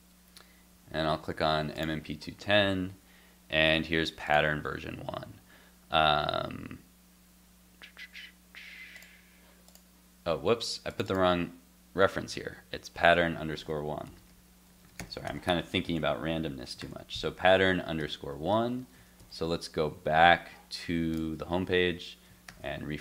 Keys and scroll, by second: 15.9 super+s, 16.8 super+s, 18.0 super+Tab, 19.2 super+Left, 22.5 shift+super+r.